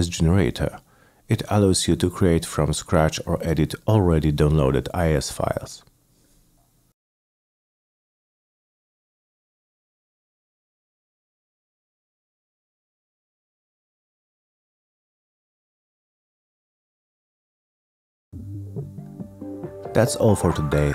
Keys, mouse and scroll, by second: 1.3 click, 2.6-3.7 drag, 4.5 click, 5.8 click, 6.6 click, 7.4 click, 8.2 click, 9.3 click, 10.3 click, 10.9 click, 11.5 click, 11.6 click, 12.5 click, 13.6 click, 14.9 click, 15.8 click, 16.3 click, 16.4 click, 17.1 click, 17.7 click, 18.8 click, 20.4 click.